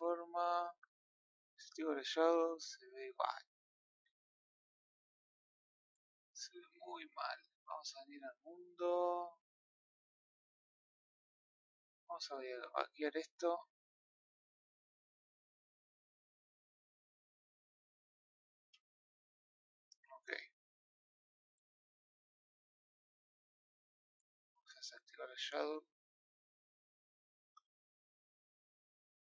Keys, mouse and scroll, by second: 1.6 click, 2.4 scroll down 5, 2.9-3.9 middle drag, 3.9 r, 16.9 click, 17.1-17.9 middle drag, 17.9 scroll up 2, 18.4-19.0 scroll down 4, 22.8-29.3 drag.